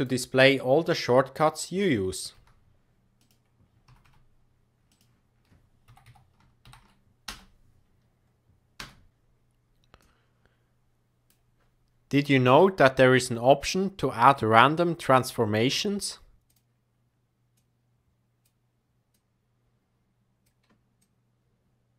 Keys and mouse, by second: 2.3 g, 3.8 r, 5.8 Right, 6.0 Right, 6.6 shift+Left, 7.2 space, 8.8 space, 9.9-11.3 drag, 12.5-15.2 drag, 16.4 click, 17.5 click, 19.1-20.4 drag, 21.0-21.9 drag.